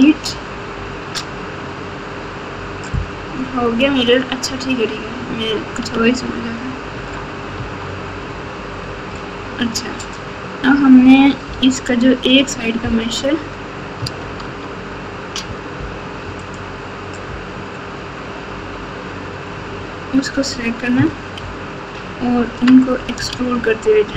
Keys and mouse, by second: 0.2 x, 5.9 Tab, 6.9 Tab, 7.5 Tab, 12.8 ctrl+KP_8, 13.3-14.0 ctrl+KP_8, 14.4 Tab, 16.5 click, 21.3 ctrl+KP_6, 21.9-22.4 ctrl+KP_6, 22.7 ctrl+KP_6, 23.3 alt+z, 24.1 KP_8.